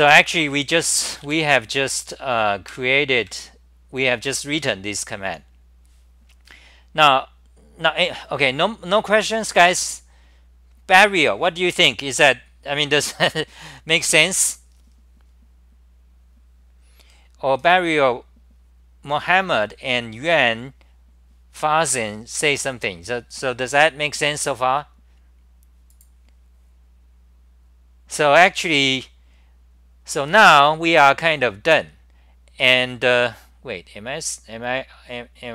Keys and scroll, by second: 1.2 ,, 2.7 super+-, 3.2 super+-, 4.7 Home, 4.9 s, 5.2 s, 16.7 s.